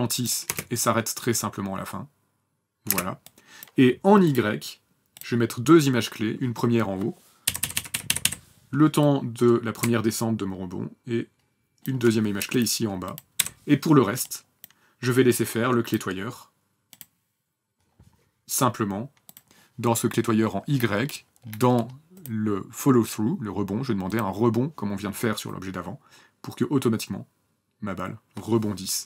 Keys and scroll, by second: 1.8 space, 4.2 space, 7.3 Page_Down, 7.4 Page_Down, 7.5 Page_Down, 13.1 Delete.